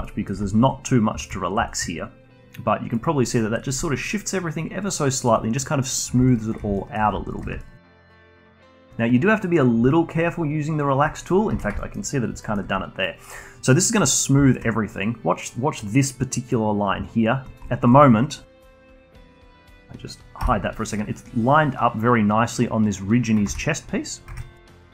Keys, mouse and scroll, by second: 0.0-0.5 alt+middle drag, 0.5-1.7 alt+drag, 1.7-3.8 shift+right drag, 3.8-6.3 alt+drag, 6.5 alt+shift+click, 6.8-7.3 alt+middle drag, 7.3 alt+shift+click, 7.6-8.1 alt+middle drag, 8.1 alt+shift+drag, 8.3 alt+click, 8.6-9.9 shift+right drag, 9.9 alt+click, 11.3 scroll up 2, 11.5 ctrl+z, 11.8-12.1 alt+middle drag, 12.1 scroll down 1, 12.4-14.5 alt+middle drag, 14.5 shift+right click, 17.6-19.4 alt+drag, 19.4 Tab, 20.4 h, 23.5 ctrl+z, 24.3 Tab.